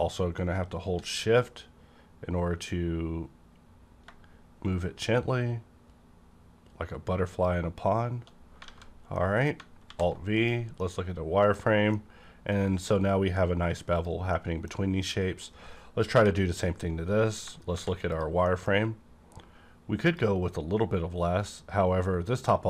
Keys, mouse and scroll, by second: 0.3 shift+scroll down 1, 1.9-2.3 shift+scroll down 2, 7.3 shift+click, 8.3-9.1 shift+scroll down 4, 8.7 alt+a, 9.1 middle click, 9.4 scroll down 1, 9.9 alt+v, 10.3 click, 11.1 middle click, 11.1 click, 11.6-11.9 scroll down 1, 11.9-13.9 middle drag, 13.5-13.9 scroll down 1, 13.9 click, 14.3 middle click, 14.3 middle click, 15.1-15.5 scroll up 1, 16.1-16.4 scroll up 1, 16.1 /, 16.8 scroll down 1, 17.1-17.4 scroll up 1, 17.7 alt+v, 18.1 click, 18.4 middle click, 18.7 scroll up 1, 20.0 click.